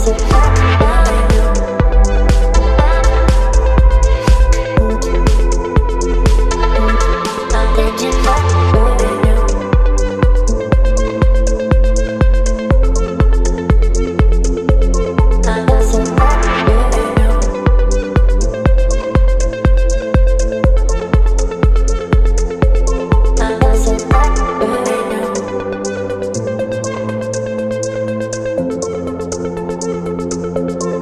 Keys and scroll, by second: 16.1 space.